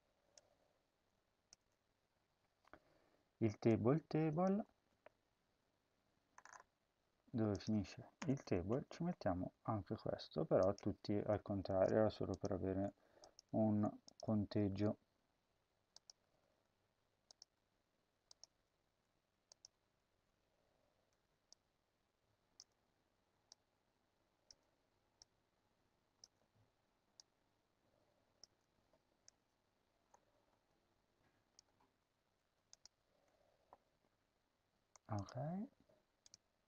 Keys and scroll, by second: 1.4 BackSpace, 4.6 ctrl+c, 8.1 Return, 8.4 Home, 8.9 ctrl+v, 11.6-14.3 typing, 16.0 BackSpace, 16.2 BackSpace, 16.4 BackSpace, 17.3 BackSpace, 18.7 Tab, 19.6 Tab, 22.5 BackSpace, 24.4 BackSpace, 28.3 BackSpace, 31.3 Tab, 31.5 Tab, 32.1 Tab, 32.9 ctrl+s.